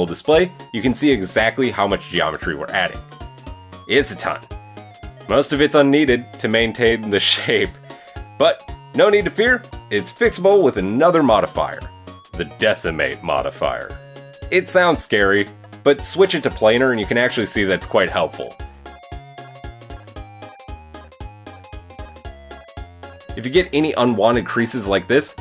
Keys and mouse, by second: 0.2 Tab, 1.1 Tab, 2.9 click, 4.5 click, 4.6 middle click, 5.3 drag, 5.5-10.0 middle drag, 10.0-15.8 drag, 15.8-19.8 middle drag, 19.8 click, 19.9-25.4 middle drag.